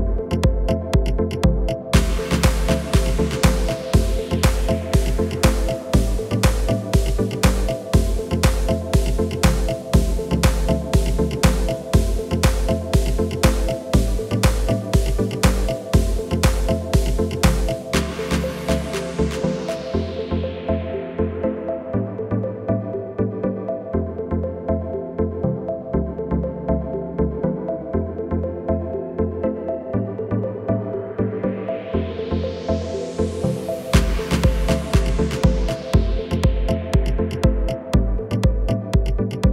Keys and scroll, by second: 2.9 Tab, 23.8 Delete, 31.9 f, 32.5 Tab, 38.8 Tab.